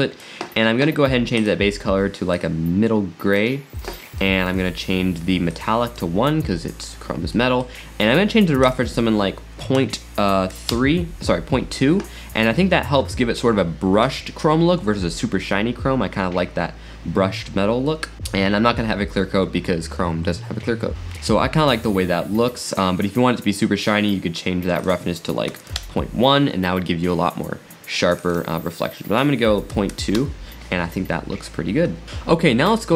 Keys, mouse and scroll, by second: 1.0-1.4 scroll up 5, 1.4 click, 4.2-5.5 middle drag, 5.5-7.3 drag, 7.3-8.6 middle drag, 8.6-10.8 drag, 10.9 click, 12.5 scroll up 1, 17.9-19.8 middle drag, 24.8 click, 28.2-31.3 drag, 32.8 scroll down 2.